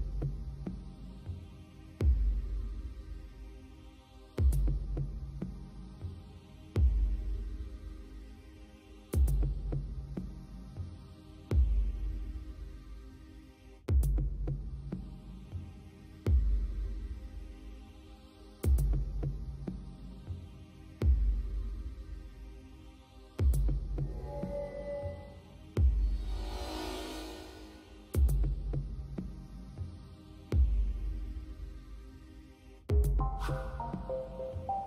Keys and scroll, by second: 26.6 space.